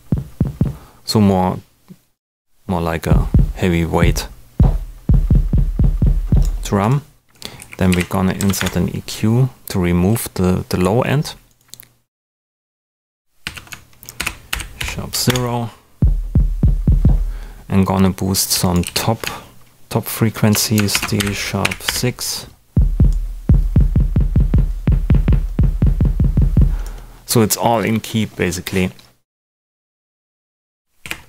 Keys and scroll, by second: 7.5 e, 7.9 p, 8.3 Down, 8.5 Return, 9.1 super+Return, 13.4 super+a, 14.1 shift+super+d, 14.5 shift+#, 14.7 0, 15.2 Return, 18.8 super+a, 20.6-22.1 typing, 30.6-31.2 typing.